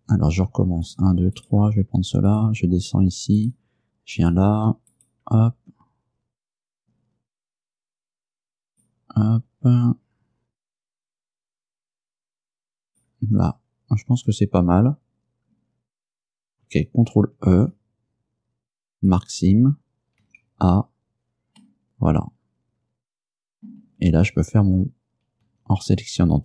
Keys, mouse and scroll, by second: 0.9 shift+right click, 1.4 shift+right click, 2.4 shift+right click, 3.5 shift+right click, 4.2 shift+right click, 5.0 shift+right click, 8.8 shift+right click, 12.9 shift+right click, 17.6 ctrl+e, 19.2 click, 20.3 a, 21.7-23.9 middle drag, 25.5 a.